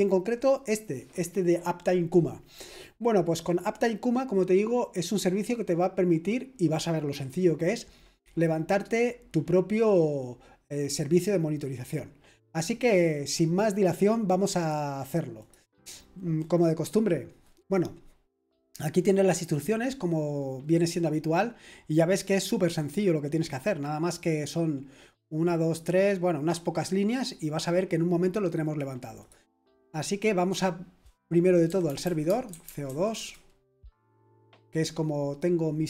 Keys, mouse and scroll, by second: 14.6 click, 15.4 click, 19.3 click, 20.6-28.6 scroll down 1, 28.6 click, 29.2 click, 31.4-34.1 typing.